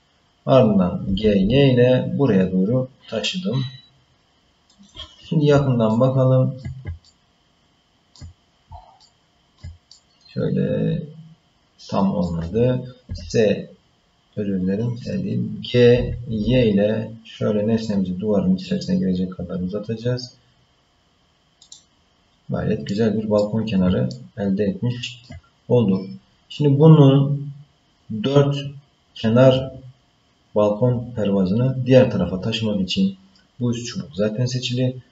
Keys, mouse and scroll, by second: 1.0 g, 5.9 shift+middle click, 7.0-8.1 ctrl+middle drag, 9.0 shift+middle click, 9.9-12.2 middle drag, 13.1 s, 15.9 g, 22.3-22.9 scroll down 2, 22.9 middle click, 24.1-25.2 ctrl+middle drag.